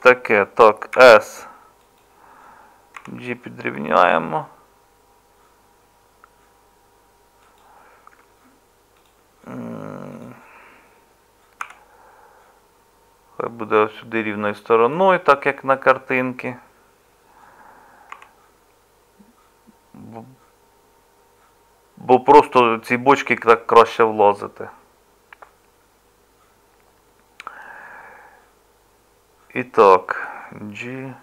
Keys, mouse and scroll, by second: 1.0 s, 3.0 g, 11.6 r, 18.1 g.